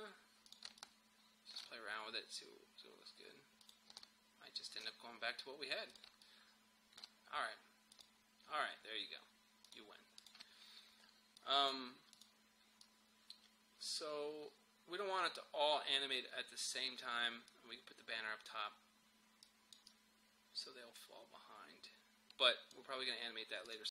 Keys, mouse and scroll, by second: 0.8-3.6 alt+drag, 4.0-5.9 alt+drag, 6.2-23.7 alt+drag.